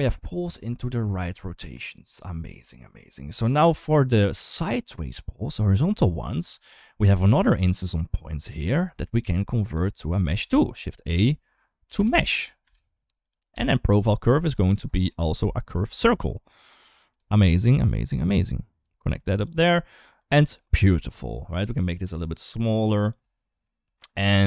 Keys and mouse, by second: 0.9-2.0 middle drag, 2.5 shift+middle click, 5.4 middle click, 5.9 middle click, 6.7 middle click, 7.3 middle click, 8.3 middle click, 8.8 click, 9.5 g, 10.3 shift+a, 13.3 g, 15.0 click, 15.4 shift+middle click, 15.8 shift+d, 17.4 click, 17.9 click, 18.7-19.2 drag, 20.0 middle click, 21.1-22.9 shift+drag, 23.7 middle drag.